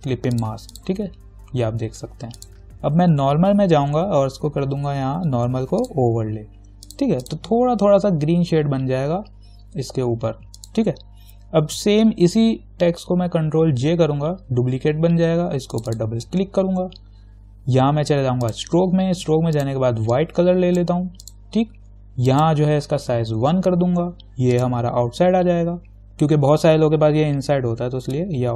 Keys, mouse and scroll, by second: 6.0 click, 10.8 click, 13.7 ctrl+j, 15.9 click, 18.7 click, 23.7 1, 24.8 click.